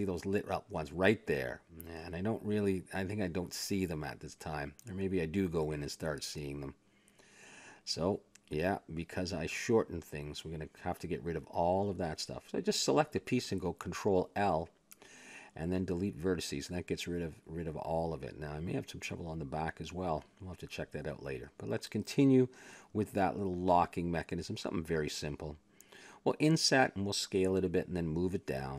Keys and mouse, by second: 1.9 x, 2.9 ctrl+z, 5.2 Tab, 5.8 click, 7.1 ctrl+l, 7.6 x, 9.4-10.5 middle drag, 10.5-14.6 drag, 14.8 ctrl+l, 15.4 x, 16.6-17.6 middle drag, 18.0-20.0 middle drag, 19.7 Tab, 20.5 a, 20.7 middle click, 24.4 click, 24.6 Tab, 25.9 KP_1, 27.1 i, 28.0 s.